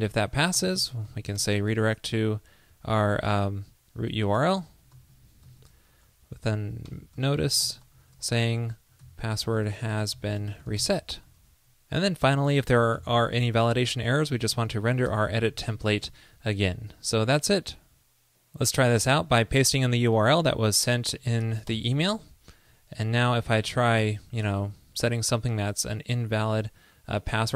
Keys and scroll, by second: 7.9 ctrl+i, 8.0 ctrl+l, 16.1 super+s, 21.3 super+v.